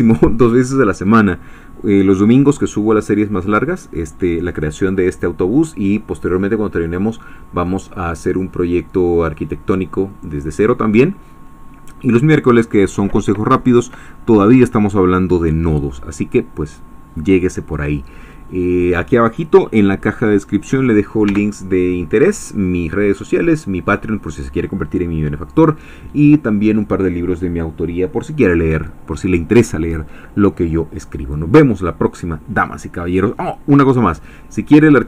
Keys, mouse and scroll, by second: 21.8 Caps_Lock.